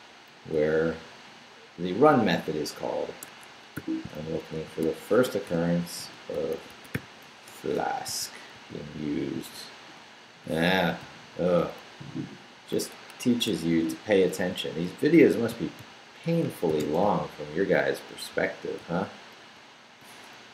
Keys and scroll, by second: 0.5 Up, 1.5 Down, 3.2 Escape, 3.7 /, 4.2 shift+f, 5.2-8.1 typing, 7.4 Return, 10.7 Down, 13.1 Escape, 13.7 shift+a, 14.3 shift+Left, 14.8 Right, 15.5-16.8 typing, 17.0 super+_, 18.8 super+v, 20.4 super+Left.